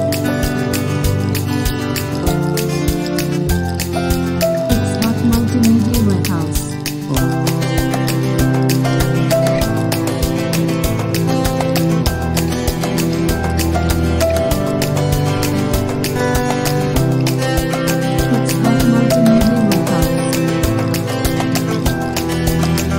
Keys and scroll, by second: 4.8 shift+super+s, 16.3 shift+super+s.